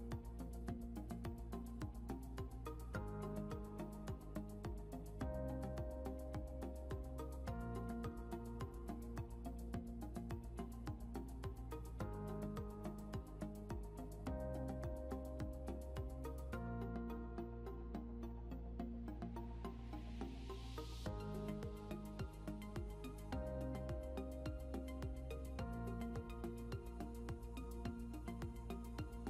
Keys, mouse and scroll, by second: 4.1 scroll down 1, 5.7 click, 11.2 scroll down 1, 15.4 shift+click, 20.1 click, 27.6-29.2 typing.